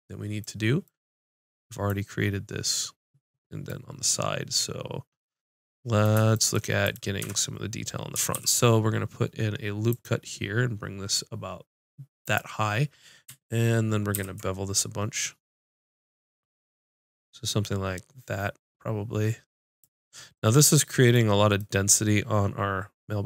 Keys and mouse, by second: 6.8 click, 7.2 Tab, 7.3 click, 7.8-9.9 drag, 8.3 ctrl+r, 11.6 ctrl+r, 12.6-14.1 drag, 14.1 ctrl+b, 20.3-21.6 drag.